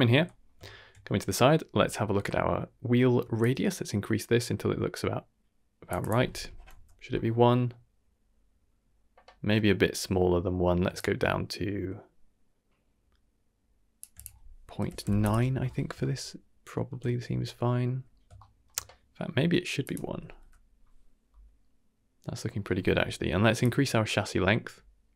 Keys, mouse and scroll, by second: 0.2 middle drag, 0.6 shift+middle drag, 1.0 middle click, 3.4-5.9 shift+drag, 6.0 shift+click, 7.4-9.5 middle drag, 9.6 middle click, 10.9-14.0 shift+drag, 14.1-15.2 drag, 16.0-16.8 shift+middle drag, 17.0-17.4 middle drag, 17.4 KP_1, 17.8 KP_3, 18.3 shift+middle drag, 19.8 click, 21.3-22.5 middle drag, 23.6 shift+click.